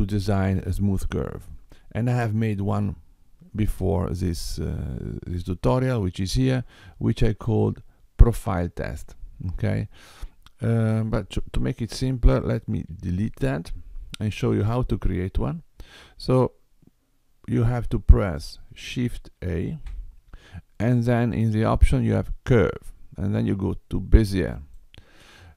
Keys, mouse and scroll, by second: 5.3 click, 12.0 x, 14.7 middle click, 17.6 click, 19.6 shift+a.